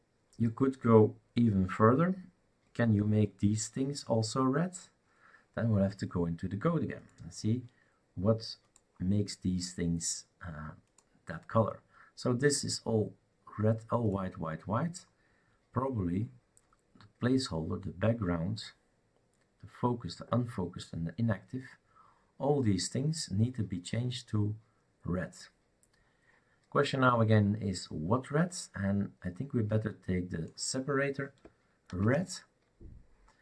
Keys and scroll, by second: 32.0 ctrl+c.